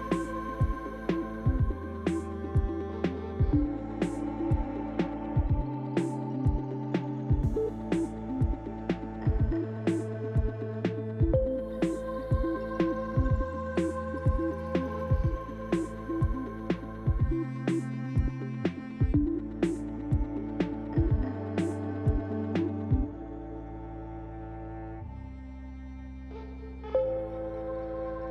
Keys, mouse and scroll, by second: 0.8 click, 1.5 Tab, 2.9 click, 3.7 click, 4.5 click, 5.2 Tab, 5.6 click, 6.7 l, 8.4 click, 10.0 click, 16.3 click, 17.6 Tab, 18.4-18.9 scroll down 4, 19.7 click, 19.7-20.4 scroll down 2, 20.5 click, 24.0 shift+middle click.